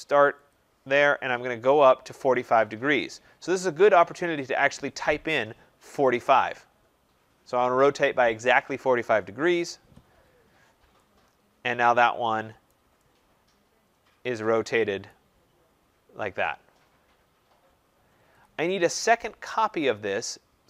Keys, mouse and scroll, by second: 0.4 click, 5.6-6.4 typing, 9.8 Return, 12.9 right click, 13.7 right click, 15.0 right click, 18.4 click.